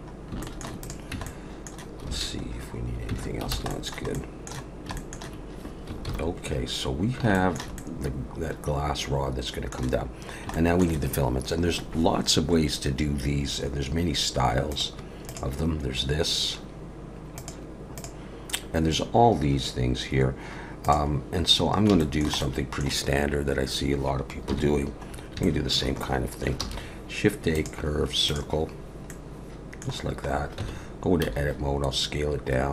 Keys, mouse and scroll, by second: 0.0 shift+middle click, 0.0 scroll down 2, 0.4 shift+middle click, 0.8 click, 1.1 Tab, 1.2 middle click, 2.1 alt+a, 2.5 scroll down 2, 3.1 Tab, 3.3 scroll down 2, 3.5 alt+a, 3.7 middle click, 4.1 middle click, 4.6 scroll down 2, 4.9 shift+middle click, 6.7 ctrl+s, 7.3 shift+middle click, 7.8 middle click, 10.2 scroll down 1, 10.5 shift+middle click, 22.0 shift+middle click, 24.5 KP_1, 25.1 scroll up 3, 25.4 shift+middle click, 26.6 shift+a, 28.8-29.2 scroll down 2, 29.1 middle click, 30.3-31.2 scroll up 2, 30.6 Tab, 31.2 s.